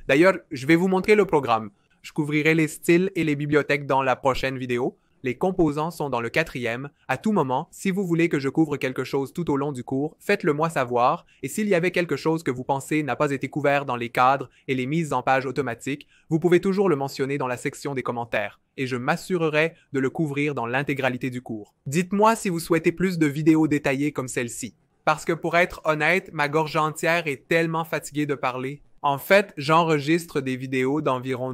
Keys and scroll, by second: 12.1 2.